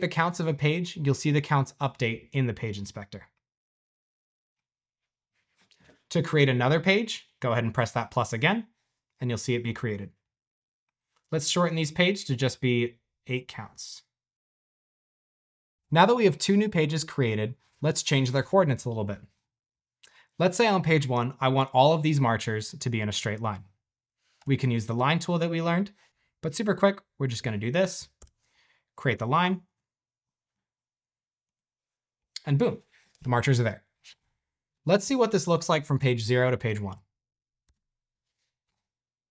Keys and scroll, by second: 24.3 typing, 28.1 shift+Return, 36.8 q, 37.7 space.